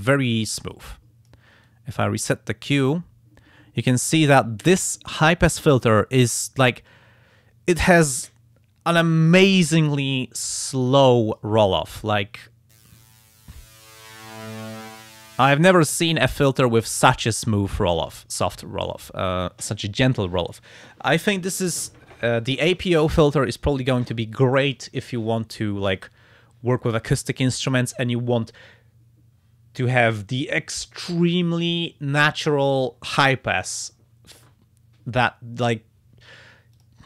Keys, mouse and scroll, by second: 0.7 click, 1.6 click, 5.4-11.5 drag, 13.4-15.5 drag, 36.8 click.